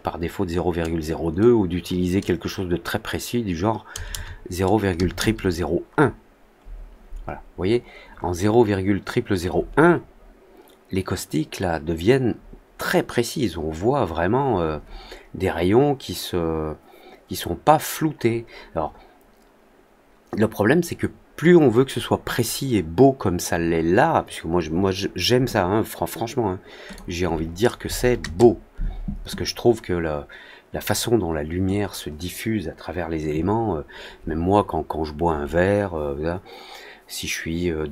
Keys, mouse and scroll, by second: 7.5 middle click, 8.0-8.5 scroll down 2, 26.8 click.